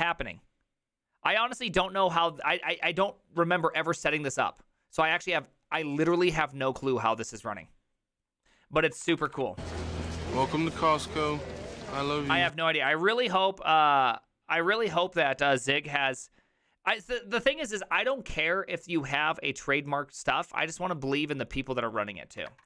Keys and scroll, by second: 0.0-0.4 typing, 8.8-10.9 typing, 10.7 ctrl+c, 11.0 Return, 15.9 ctrl+a, 16.1 2, 22.5 alt++.